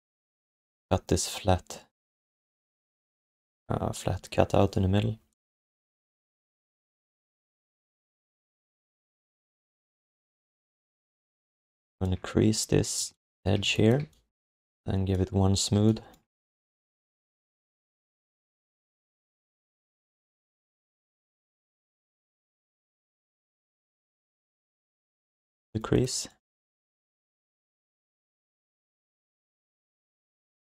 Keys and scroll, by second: 6.1 alt+q, 13.0 q, 13.6 alt+shift+d, 15.7 q, 16.3 alt+shift+d, 25.3 q, 28.2 alt+shift+d, 29.1 alt+q.